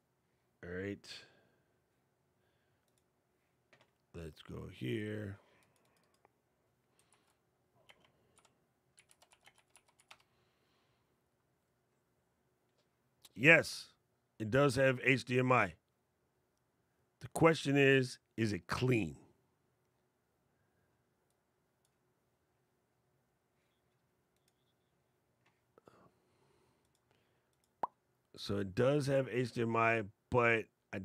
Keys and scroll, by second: 6.8 super+v.